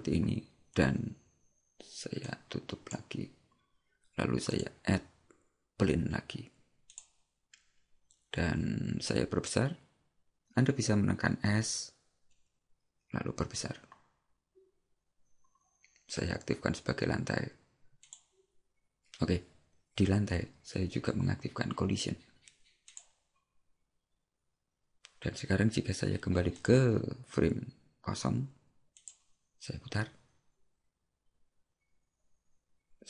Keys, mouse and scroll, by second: 2.3 click, 4.5 click, 22.9 click, 26.6 click.